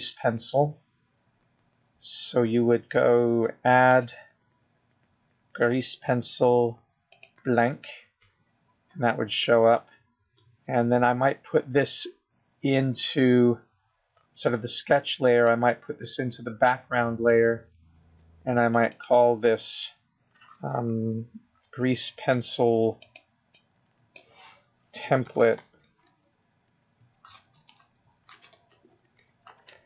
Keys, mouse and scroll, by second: 0.7 click, 2.7 click, 6.3 click, 8.2 click, 11.0-13.5 scroll down 2, 15.2-15.9 scroll down 1, 15.9-17.9 scroll up 2, 17.9 click, 21.2 click, 21.3 click.